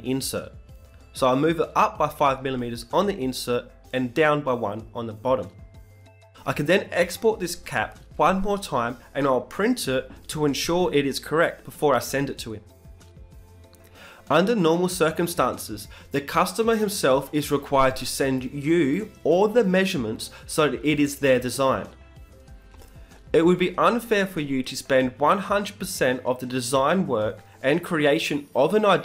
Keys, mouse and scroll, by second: 3.0 b, 3.4-5.4 right drag, 3.7 b, 4.4 g, 7.0 Tab, 7.9 Tab, 9.0 Tab, 9.3-10.9 middle drag, 9.7 z, 11.7 middle click, 12.4 t, 14.4-16.3 drag, 17.4 t, 18.9-20.9 middle drag.